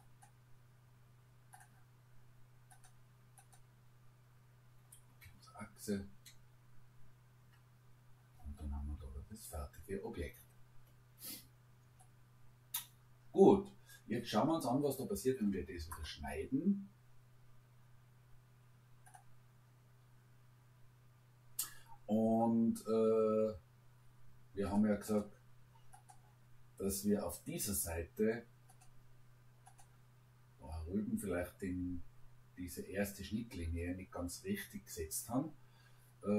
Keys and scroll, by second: 5.2 Return, 7.4 Return, 9.0 Escape.